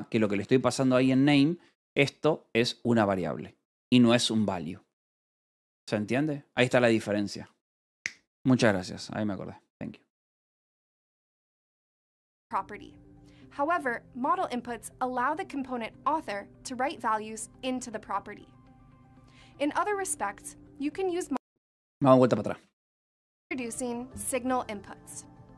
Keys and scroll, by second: 0.0-2.3 typing, 4.2 Escape, 4.8-5.9 typing.